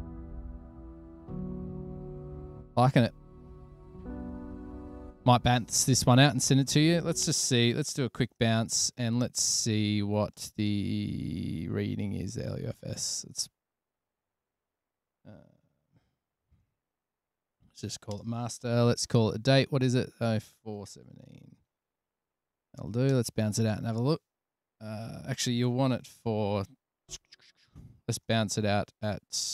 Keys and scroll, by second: 0.1 super+], 0.2 super+], 0.9 super+[, 2.5 super+s, 8.0 super+s, 8.6 alt+super+b, 9.2 Tab, 16.1-17.2 typing, 18.3-19.6 typing, 20.9-21.4 typing, 22.4-23.1 typing, 23.4 Return, 26.3 Escape, 28.5 alt+super+b.